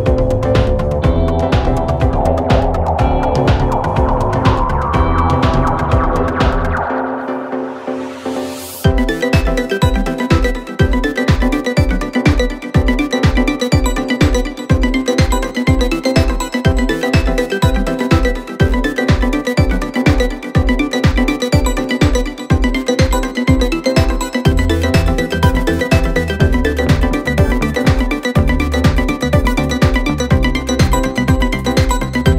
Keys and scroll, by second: 13.5-14.5 typing.